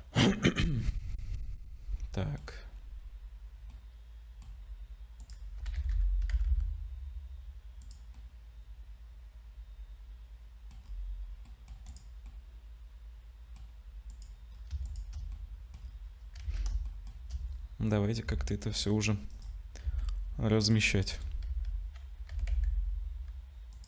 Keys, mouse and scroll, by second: 1.1 click, 1.3-1.6 scroll down 5, 1.6 middle click, 3.7 middle click, 4.5 scroll up 2, 5.2 click, 5.6 g, 8.2 middle click, 10.8-11.4 scroll down 5, 11.4 middle click, 11.9 click, 12.5 middle click, 14.1 click, 14.5-14.8 scroll up 3, 14.8 shift+click, 15.3 middle click, 15.8-16.5 scroll down 3, 16.5 ctrl+s, 16.9 shift+middle click, 18.2 s, 19.8 s, 21.1 KP_0, 21.5 z, 22.3 r.